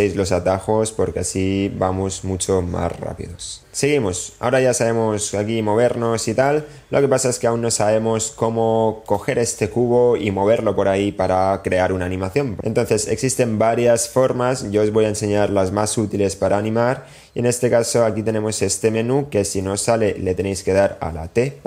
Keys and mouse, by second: 4.8 middle click, 7.6 click, 19.4 t, 20.1 t, 20.6 t.